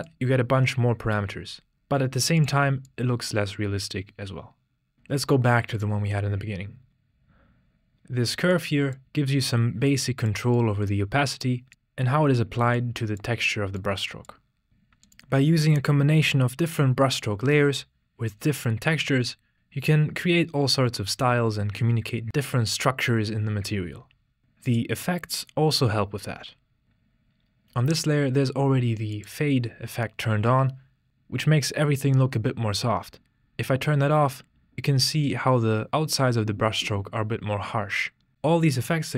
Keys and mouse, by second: 0.1-2.4 drag, 2.9-6.2 drag, 8.5 click, 9.9 click, 10.6 click, 12.8-13.4 drag, 13.8 click, 14.7 click, 24.6 click, 29.4 click.